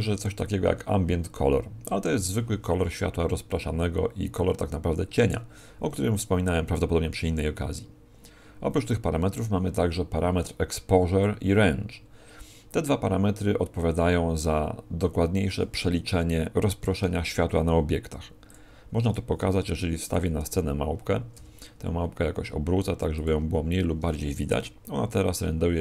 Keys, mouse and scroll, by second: 16.7 shift+a, 19.4 g, 20.1 click, 20.4 r, 23.2 click.